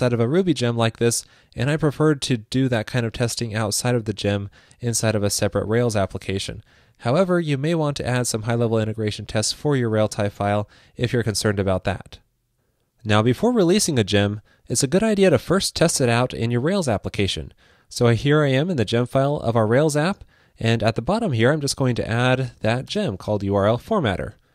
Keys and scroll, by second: 10.3 super+s, 21.4 super+Down.